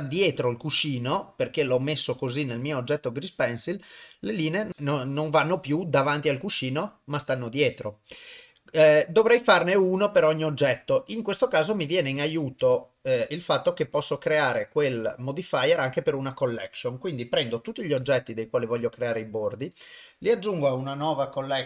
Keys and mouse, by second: 2.6 click, 9.6 click, 11.5 click, 12.6 click, 12.7 shift+click, 13.9 shift+click, 14.6 shift+click, 18.0 m.